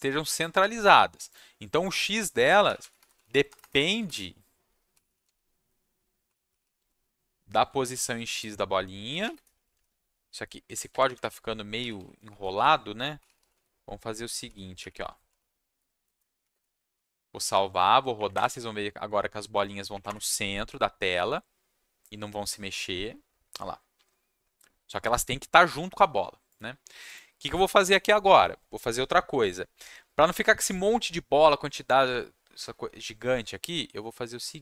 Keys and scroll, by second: 2.4-9.2 typing, 9.6 Down, 9.7 Left, 10.9 Left, 11.0 Left, 11.2 Left, 11.5-16.5 typing, 16.9 ctrl+s, 18.1 Up, 18.3 Return, 19.9 Up, 20.0 Return.